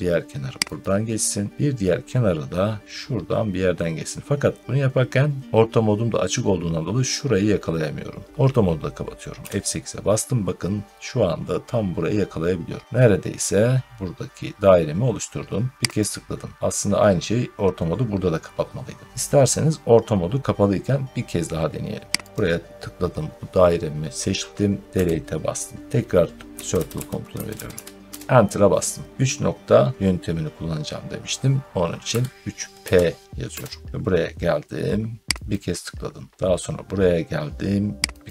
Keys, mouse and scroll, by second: 0.7 click, 9.3 F8, 15.8 click, 22.3 click, 24.8 Delete, 26.2-28.1 typing, 31.7-33.4 typing, 35.4 click, 38.2 click.